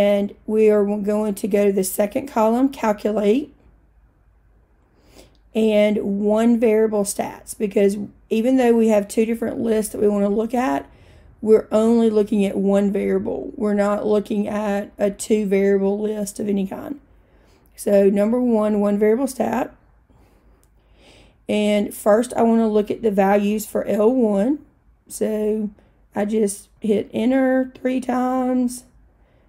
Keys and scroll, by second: 3.5 Right, 19.9 Return, 26.8 Return, 27.7 Return, 28.4 Return.